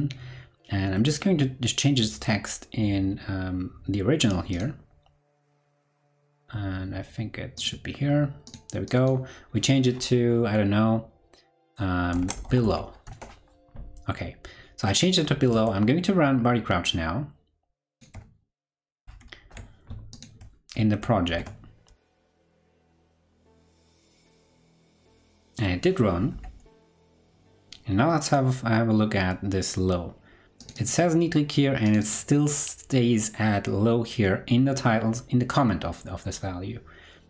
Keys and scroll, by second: 15.5 super+Tab, 19.0 ctrl+Right, 19.5 ctrl+Right, 21.2 super+r, 26.8 ctrl+Left.